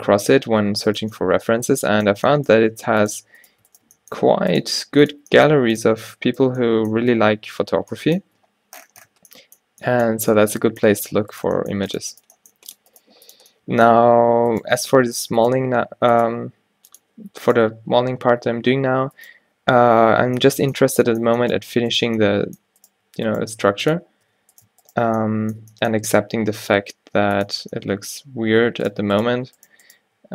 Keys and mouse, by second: 0.6 Tab, 2.3 g, 4.0 g, 4.9 r, 5.3 g, 6.0 Tab, 7.1 Tab, 7.6 Tab, 8.5 Tab, 9.1 Tab, 10.2 Tab, 11.5 g, 12.4 right click, 13.1 g, 15.1 g, 16.4 g, 18.7 v, 19.7 ctrl+z, 23.5 g, 26.1 e, 27.0 e, 28.9-30.0 drag, 30.2-30.3 drag.